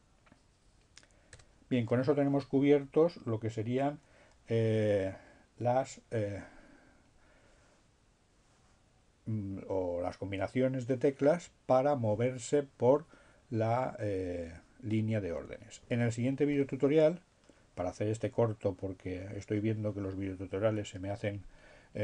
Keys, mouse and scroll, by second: 0.7 BackSpace.